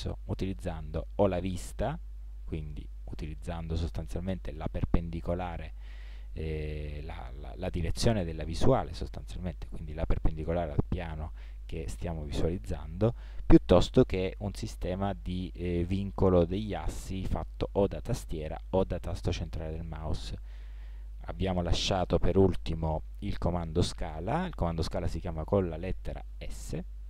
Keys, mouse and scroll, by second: 2.5 KP_1, 12.7 KP_7, 14.0-15.9 middle drag, 19.4-19.9 middle drag, 26.3 s.